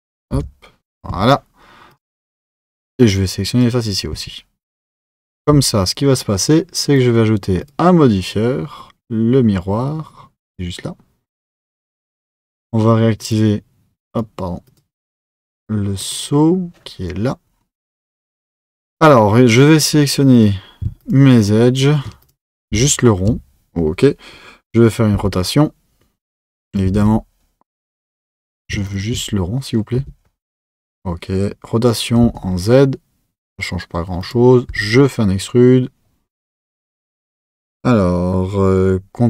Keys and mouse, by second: 0.3 KP_7, 1.1 x, 3.0 click, 4.1 x, 5.4 Tab, 6.9 click, 7.6 click, 10.6 click, 13.2 Left, 13.2 click, 14.1 Left, 14.1 click, 14.6 Left, 14.6 click, 15.5 Left, 15.5 click, 16.0 Left, 16.0 click, 18.8 click, 19.5 Left, 19.5 click, 20.3 Left, 20.3 click, 21.0 alt+shift+click, 21.4 alt+shift+click, 22.2 click, 22.8 alt+shift+click, 25.1 r, 26.9 z, 28.0 click, 28.9 alt+shift+click, 30.0 r.